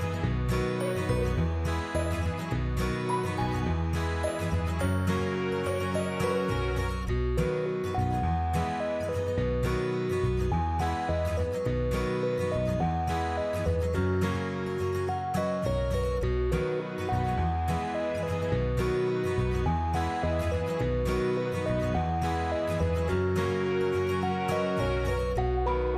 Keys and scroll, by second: 2.3 9, 3.7 BackSpace, 3.9 5, 4.1 Return.